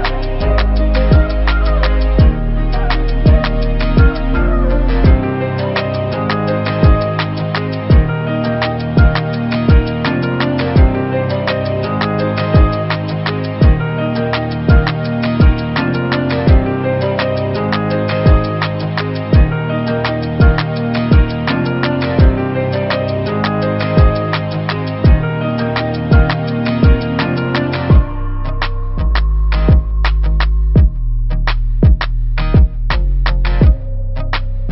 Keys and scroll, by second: 32.3 t.